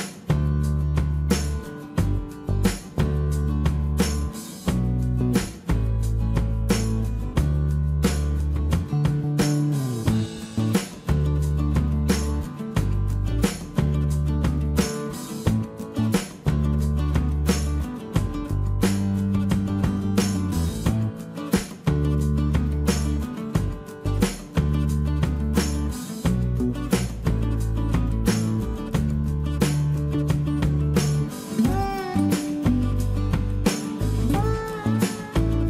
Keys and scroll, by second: 0.8 Escape, 5.6 space, 8.6-9.4 typing, 10.7 space, 12.5 space, 13.9 space, 23.5 Escape, 31.9 space, 32.0 Escape, 34.4 Escape, 35.2 Escape.